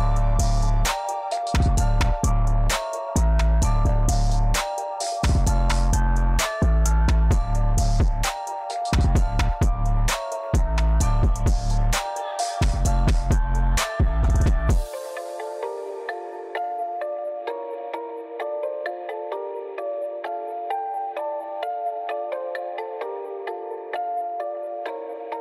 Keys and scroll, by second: 4.5 3, 4.9 Return, 7.0 z, 11.0 Escape, 13.1 i, 14.9 Escape, 16.5 Escape, 18.4-20.8 typing, 19.0 Escape, 20.9 Return, 22.2-22.9 typing, 24.6-25.4 typing.